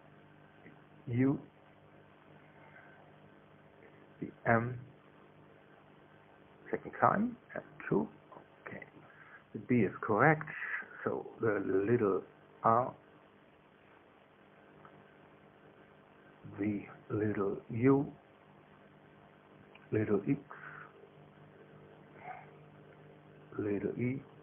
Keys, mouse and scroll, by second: 1.5 right click, 2.5 click, 3.4 shift+u, 4.0 Return, 5.5 right click, 6.5 click, 7.4 shift+m, 8.1 shift+2, 8.9 Return, 10.5 right click, 13.1 right click, 14.3 middle click, 15.0 r, 15.5 Return, 17.4 right click, 18.4 click, 19.3 u, 19.8 Return, 21.0 right click, 21.9 click, 22.7 x, 23.2 Return.